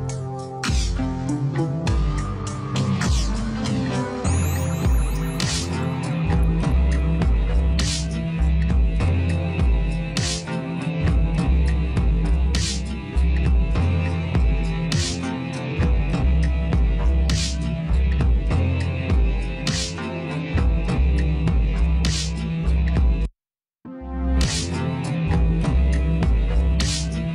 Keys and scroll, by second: 9.4 space, 10.3 space, 16.8 v, 16.8 space.